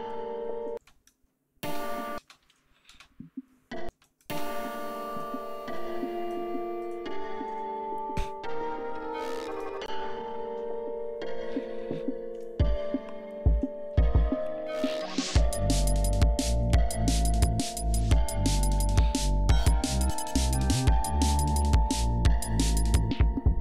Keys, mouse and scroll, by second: 0.8 space, 0.9 click, 1.7 space, 2.9 ctrl+space, 3.4 ctrl+scroll down 2, 3.9 ctrl+space, 4.1 ctrl+click, 5.1 click, 5.8 click, 6.8 right click, 9.5 click.